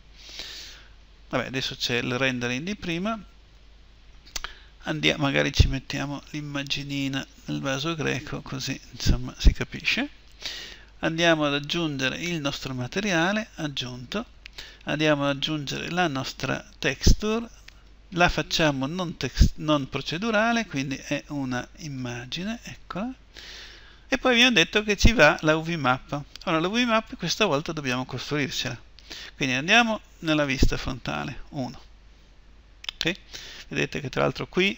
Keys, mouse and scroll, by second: 25.9-28.8 middle drag, 28.8-30.9 drag, 30.9 KP_1.